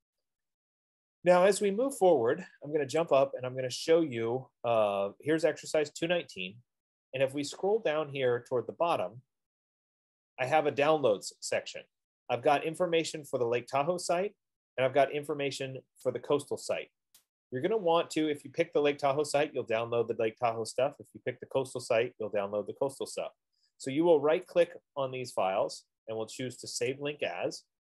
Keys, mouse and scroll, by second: 3.9 click, 7.2-9.3 scroll, 9.7-10.2 scroll, 10.4-10.7 scroll, 25.1 right click, 27.4 click.